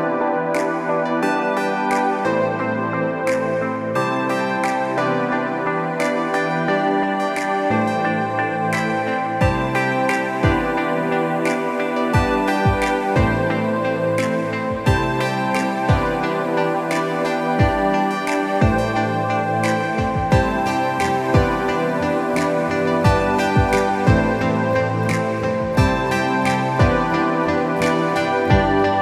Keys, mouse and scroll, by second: 0.6 Return, 1.6 m, 17.4 z, 17.7-22.9 drag, 24.9 z, 25.1 click, 26.5 alt+Tab.